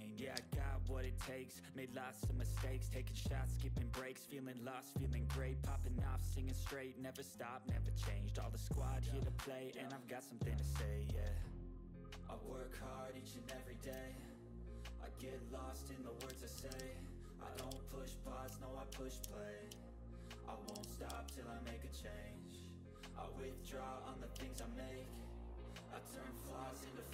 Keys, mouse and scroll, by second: 0.3 5, 0.6 click, 4.1-6.5 drag, 7.1-7.4 ctrl+scroll down 1, 7.5-12.8 drag, 13.8 click, 13.8 typing, 14.2-18.2 drag, 18.2 Right, 18.3 click, 19.1 ctrl+g, 19.6-20.1 ctrl+scroll down 1, 20.6 Left, 21.3-21.6 ctrl+scroll down 1, 22.3 ctrl+middle click, 22.4-22.7 ctrl+scroll down 1, 22.7 click, 24.2 click, 24.2-24.5 typing, 24.5 ctrl+d, 24.8-26.6 drag.